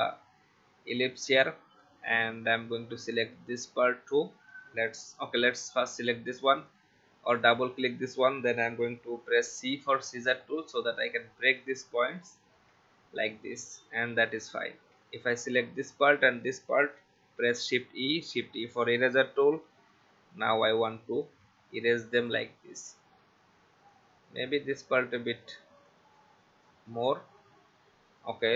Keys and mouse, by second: 0.0 click, 3.6 shift+click, 5.2 click, 9.3 c, 10.7 click, 12.4 click, 13.2 v, 13.8 click, 15.0 click, 16.1 shift+click, 17.4 shift+e, 21.3 alt+click, 24.0 alt+click, 25.9 alt+click, 28.5 ctrl+z.